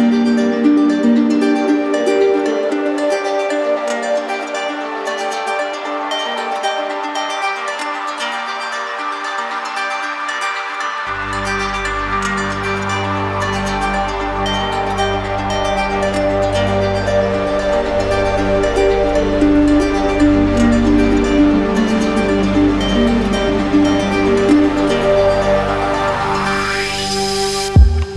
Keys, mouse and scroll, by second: 0.0 shift+click, 0.2 shift+click, 0.2 shift+click, 0.2 right click, 0.4 shift+click, 0.4 shift+click, 0.5 shift+click, 0.6 click, 0.7 click, 0.7 alt+click, 0.8 alt+click, 0.9 click, 1.0 shift+click, 1.0 shift+click, 1.2 alt+click, 1.5 shift+click, 1.5 alt+click, 1.7-2.4 shift+click, 1.7 click, 1.9 click, 1.9 click, 2.0 alt+right click, 2.0 right click, 2.2 shift+click, 2.4 alt+right click, 2.5 right click, 2.5 right click, 2.6 alt+right click, 2.9 middle click, 2.9 alt+middle click, 3.0 shift+click, 3.1 right click, 3.2 right click, 3.2 shift+click, 3.3 shift+click, 3.3 shift+click, 3.4 alt+right click, 3.8 shift+click, 3.8 alt+right click, 4.0 shift+click, 4.1 shift+click, 4.3 shift+click, 4.4 shift+click, 4.5 right click, 4.6 shift+click, 4.6 right click, 4.7 right click, 4.9 shift+click, 4.9 shift+click, 5.0 shift+click, 5.0 right click, 5.1 right click, 5.2 shift+click, 5.3 alt+right click, 5.4-5.8 shift+click, 5.5 shift+click, 5.6 shift+click, 5.9 alt+right click, 6.3 alt+right click, 7.2 alt+right click, 8.9 right click, 10.2 shift+click, 13.0 shift+click, 15.5 shift+click, 17.0 right click, 17.1 shift+click, 17.2 right click, 17.2 shift+click, 17.3 right click, 17.4-18.4 shift+click, 17.4 shift+click, 17.5 shift+click, 17.5 right click, 17.5 shift+click, 17.6 shift+click, 17.6 alt+right click, 17.7 shift+click, 17.8 right click, 17.9 shift+click, 17.9 alt+right click, 18.0 right click, 18.1 shift+click, 18.3 right click, 18.3 shift+click, 18.4 right click, 18.6 shift+click, 18.7 shift+click, 18.7 right click, 18.7 shift+click, 18.8 shift+click, 19.0 shift+click, 19.0 alt+right click, 19.1 shift+click, 19.2 shift+click, 19.3 right click, 19.3-19.7 shift+click, 19.5 shift+click, 19.6 right click, 19.6 shift+click, 19.8 right click, 19.8 shift+click, 19.9 shift+click, 20.0 alt+right click, 20.0 right click, 20.1 shift+click, 20.3 right click, 20.3 shift+click, 20.4 alt+right click, 20.5-22.2 shift+click, 20.5 shift+click, 20.6 right click, 20.6 shift+click, 20.8 right click, 20.8 shift+click, 21.2 right click, 21.4 shift+click, 21.7 alt+right click, 21.9 right click, 21.9 shift+click, 22.4 shift+click, 22.4 right click, 22.5 shift+click, 22.6 shift+click, 22.7 right click, 22.8 alt+right click, 22.9-24.6 shift+click, 22.9 shift+click, 22.9 shift+click, 23.0 right click, 23.0 shift+click, 23.2 right click, 23.2 shift+click, 23.4 right click, 23.5 shift+click, 23.6 right click, 23.6 shift+click, 23.7 right click, 24.1 shift+click, 24.1 right click, 24.2 shift+click, 24.2 shift+click, 24.2 right click, 24.3 shift+click, 24.3 right click, 24.4 shift+click, 24.5 right click, 24.5 shift+click, 24.6 alt+right click, 24.8 shift+click, 24.8 shift+click, 24.8 right click, 24.9 shift+click, 25.0 shift+click, 25.0 shift+click, 25.1 shift+click, 25.8 right click, 25.9 alt+right click, 26.0 shift+click, 26.1-26.5 shift+click, 26.2 shift+click, 26.2 right click, 26.3 right click, 26.4 shift+click, 26.5 right click, 26.6 shift+click, 26.6 right click, 26.7 shift+click, 26.8 shift+click, 26.9 right click, 27.1 alt+right click, 27.1 right click, 27.1 shift+click, 27.2 shift+click, 27.3 shift+click, 27.3 right click, 27.4 alt+right click, 27.4-27.8 shift+click, 27.4 shift+click, 27.5 right click, 27.6 shift+click, 27.9 right click, 28.0 shift+click, 28.0 right click, 28.0 shift+click, 28.1 alt+right click, 28.1 right click.